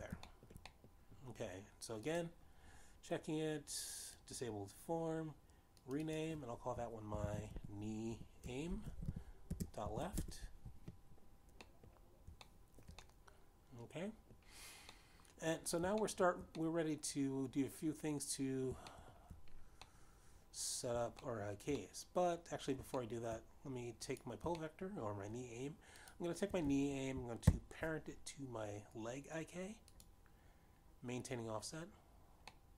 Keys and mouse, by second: 0.2 middle click, 1.2 shift+middle click, 1.9 shift+middle click, 2.3 middle click, 3.6 click, 5.7 click, 7.3 click, 7.6 click, 9.0-11.2 typing, 11.8 Return, 13.3 middle click, 14.0 shift+middle click, 14.6 middle click, 16.5 middle click, 17.6 shift+middle click, 18.1 middle click, 20.5 shift+middle click, 22.8 shift+middle click, 23.4 middle click, 24.5 shift+middle click, 25.7 click, 26.1 shift+middle click, 27.6 shift+click, 28.9 ctrl+p, 31.6 click.